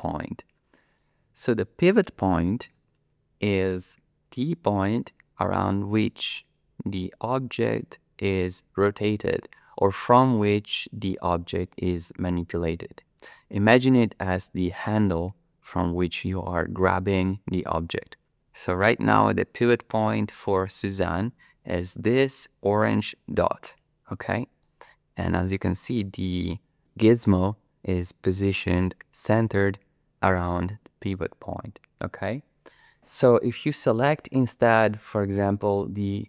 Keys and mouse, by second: 0.9 middle click, 18.4 middle click, 24.6-25.6 middle drag, 32.3-32.8 middle drag, 34.7 click.